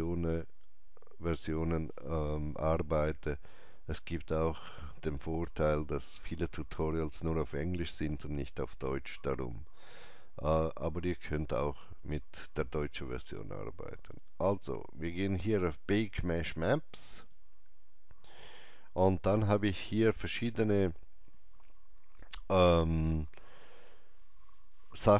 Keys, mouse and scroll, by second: 17.1 click.